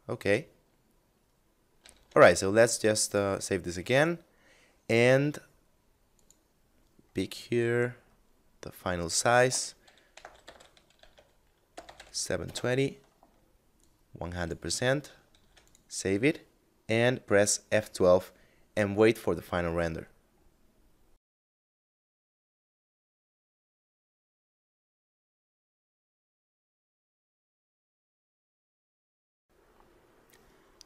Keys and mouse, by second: 1.2 ctrl+s, 2.4 click, 5.6 click, 6.8 middle click, 8.4 click, 9.5 1, 9.6 2, 9.9 8, 9.9 0, 10.4 Tab, 11.1 7, 11.3 0, 11.9 Return, 13.2 click, 14.8 ctrl+s, 14.9 click, 17.1 F12, 19.8 middle click.